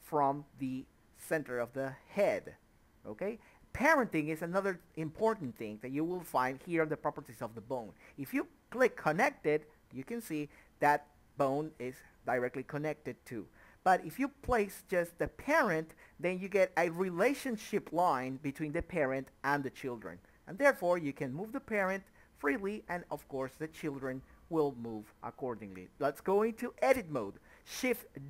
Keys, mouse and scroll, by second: 0.6 click, 5.7 click, 7.9 ctrl+z, 10.7 click, 14.2 Tab, 15.2 click, 15.7 Tab, 17.1 click, 18.2 r, 20.6 Escape, 20.8 scroll down 1, 21.1 middle click, 22.1 a, 22.4-22.8 scroll up 1, 22.8 shift+middle click, 23.1 middle click, 23.8 click, 24.2 Tab, 25.2 middle click, 26.5 KP_3, 27.9 shift+d.